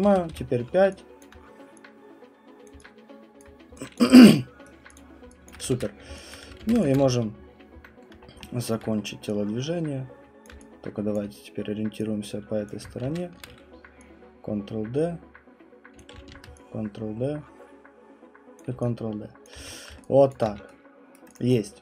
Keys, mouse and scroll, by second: 0.0-0.8 typing, 1.2 alt+click, 2.6 click, 3.4 click, 4.0 alt+click, 4.1 q, 4.6 right click, 4.9 click, 5.4 alt+click, 5.7 ctrl+d, 6.4 click, 6.6 ctrl+d, 6.9 click, 7.0 w, 8.0 alt+middle click, 8.2 middle click, 8.3 middle click, 8.4 alt+middle click, 8.6 alt+middle click, 10.4 click, 11.1 alt+click, 11.5 middle click, 12.7 click, 13.0 d, 16.0 click, 16.3 d, 18.6 click, 19.4 alt+click, 19.6 q, 19.7 scroll, 20.3 alt+click, 20.4 q, 21.1 right click, 21.4 click, 21.5-21.8 scroll.